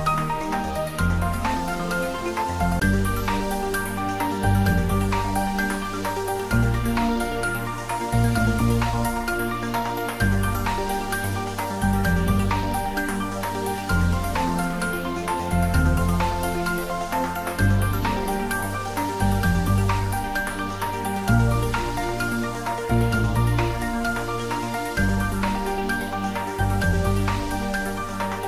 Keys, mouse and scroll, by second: 12.6 scroll down 1, 23.7-25.6 scroll down 1, 25.6 scroll down 1, 26.0-28.4 drag.